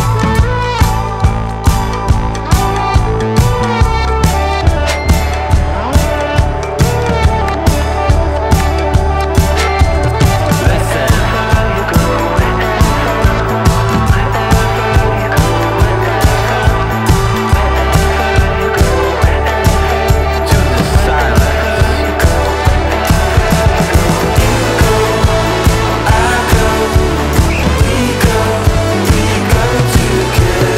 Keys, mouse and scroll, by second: 1.3-23.7 drag, 28.7 click.